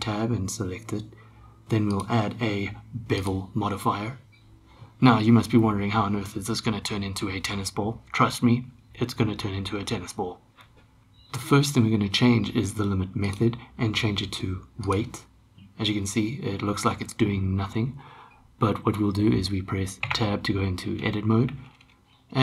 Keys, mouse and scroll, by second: 2.0-3.3 drag, 13.3-15.0 drag, 20.1 Tab.